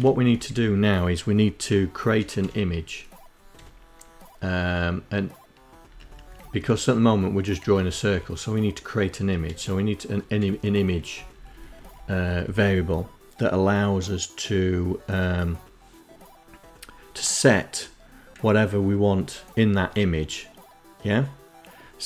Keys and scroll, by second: 0.4 Up, 1.1 Page_Up, 2.3 Page_Up, 4.5 Up, 4.7 Up, 5.0 Down, 5.3 Page_Down, 5.6 Page_Down, 6.6 Down, 6.8 Page_Down, 8.2 Page_Up, 8.3 Page_Up, 9.1 Page_Up, 9.8 Down, 10.0 Down, 10.2 Down, 10.4 Down, 10.5 Down, 10.8 Down, 11.3 Down.